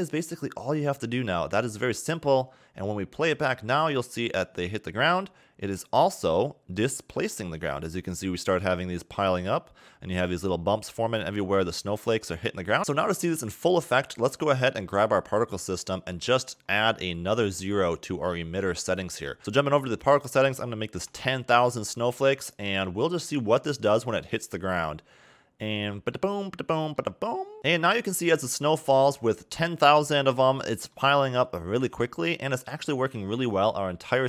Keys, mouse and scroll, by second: 1.9 click, 3.8-6.1 scroll up 1, 6.1 middle click, 7.4 scroll up 1, 12.8 middle click, 14.5 click, 15.8-16.3 scroll up 10, 16.7 scroll down 5, 17.7-18.1 scroll up 8, 19.4 click, 20.0 click, 23.5 a, 23.9 a, 26.2 middle click, 27.1-27.5 scroll up 2, 28.0 middle click, 28.9 a, 29.1 a, 30.7 middle click, 31.2 scroll up 1, 31.5 middle click, 32.8 middle click, 34.1 scroll down 2.